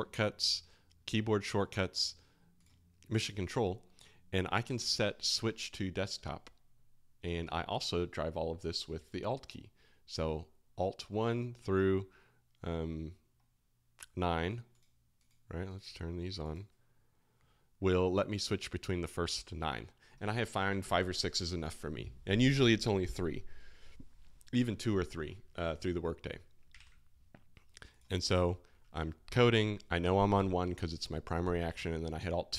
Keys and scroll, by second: 31.7 alt+2.